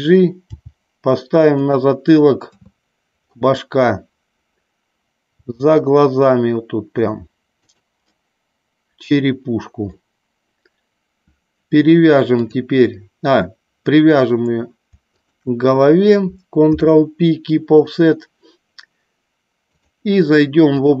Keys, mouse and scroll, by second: 0.6 g, 1.7 click, 2.6 KP_3, 5.5 g, 7.7 click, 8.2-10.1 middle drag, 12.5 click, 15.2 shift+click, 16.8 ctrl+p, 19.8-21.0 drag.